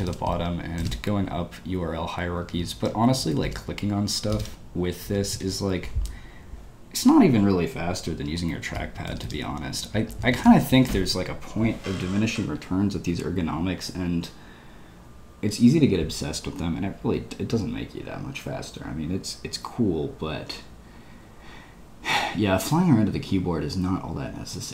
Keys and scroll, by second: 0.0-0.8 typing, 2.1-5.3 typing, 8.0-10.3 typing.